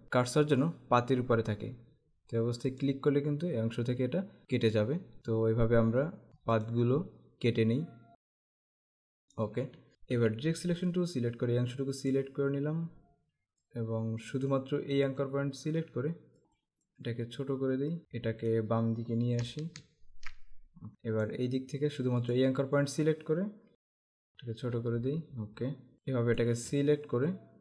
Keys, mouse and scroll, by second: 2.8 click, 4.8 click, 6.7 click, 8.3 click, 9.4 click, 10.2 a, 10.7 click, 13.7 click, 16.5 click, 17.1 Right, 18.0 click, 19.4 Left, 20.9 click, 23.7 Left, 25.9 click, 26.8-27.6 alt+scroll down 2.